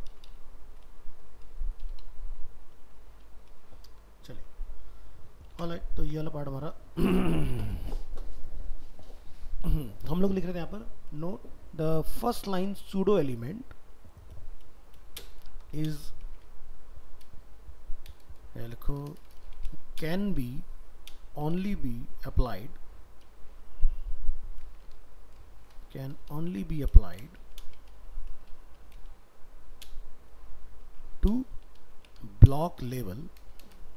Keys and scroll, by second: 2.9 ctrl+z, 4.3 ctrl+w, 5.6 ctrl+s, 25.0 ctrl+Left, 25.5 ctrl+shift+Left.